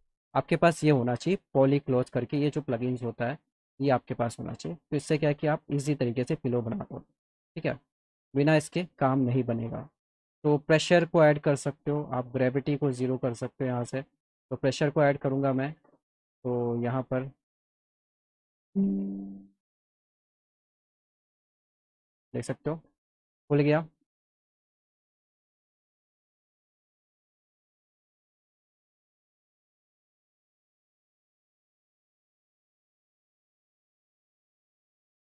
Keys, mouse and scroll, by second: 1.5 click, 3.9 click, 6.3 click, 6.6 click, 7.6 alt+middle click, 8.4 scroll up 2, 9.4 scroll up 2, 10.5 click, 12.5 click, 13.3 click, 14.6 alt+middle click, 15.3 shift+click, 17.0 click, 18.2 click, 19.5-20.6 scroll up 2, 19.9 click, 21.2 ctrl+click, 22.2 ctrl+click, 22.8 alt+middle click, 23.7 alt+middle click, 24.1 ctrl+click, 25.3 ctrl+click, 26.1 alt+middle click, 26.8 ctrl+click, 27.8 alt+middle click, 28.3 alt+middle click, 28.8-30.2 ctrl+drag, 30.5 alt+middle click, 30.9 alt+middle click, 31.5-35.2 ctrl+drag.